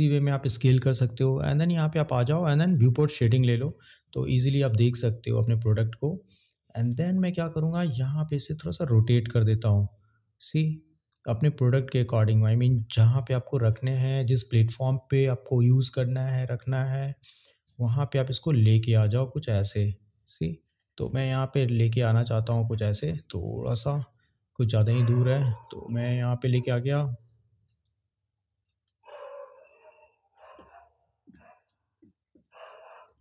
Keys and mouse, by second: 3.4 click, 6.8 click, 8.4 click, 17.3 click, 18.3 click, 19.8 click, 24.8 click.